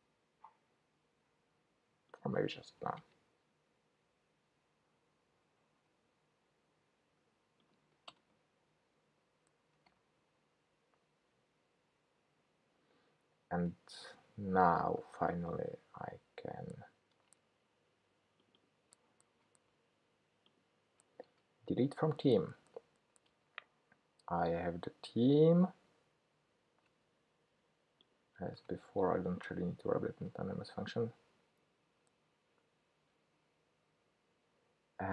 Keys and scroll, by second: 13.5 Escape, 19.4 super+c, 21.3 super+v, 28.7 ctrl+k, 30.1 super+v.